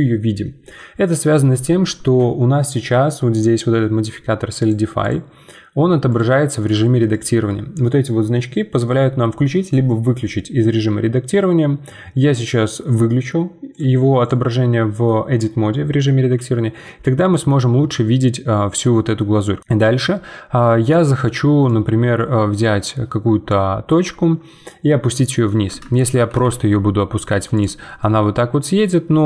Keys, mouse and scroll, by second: 4.6-10.1 drag, 13.7-16.7 drag, 16.7-19.2 middle drag, 19.2-19.6 scroll down 1, 19.6-21.6 middle drag, 21.6-24.7 drag, 25.4 middle click, 26.3 g, 28.0-29.2 middle drag.